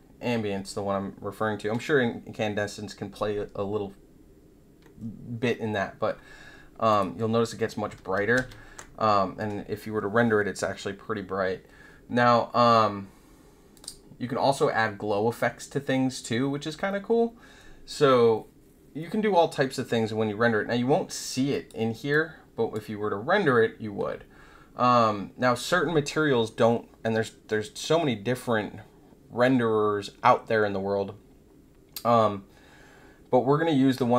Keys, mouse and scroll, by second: 6.9 click, 7.9 ctrl+z, 8.3 ctrl+z, 13.7 click, 21.5 click, 22.1-22.7 drag.